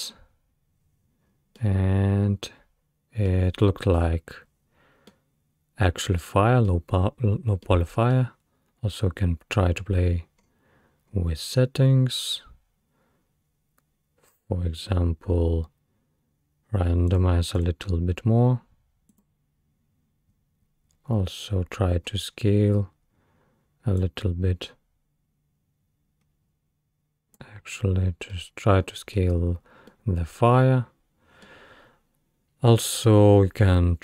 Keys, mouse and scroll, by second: 1.3 scroll down 2, 1.6-4.0 middle drag, 4.0-5.1 scroll up 4, 5.1-7.0 middle drag, 7.0-7.7 scroll down 2, 7.7-9.0 middle drag, 9.0-10.1 scroll down 2, 10.1-10.4 scroll down 1, 10.4-11.1 scroll up 3, 11.1-14.3 scroll down 5, 14.3-16.8 scroll down 2, 16.8-17.1 scroll down 1, 17.1-20.3 drag, 20.3-21.8 scroll down 8, 21.8-24.0 scroll down 6, 24.0-27.0 drag, 28.3-32.9 middle drag, 29.4-29.9 scroll up 2.